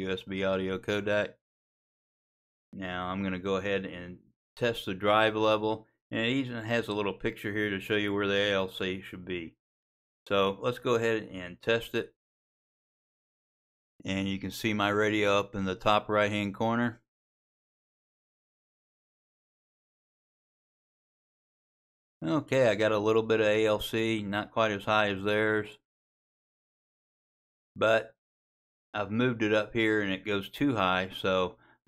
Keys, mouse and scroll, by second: 4.2-5.7 drag.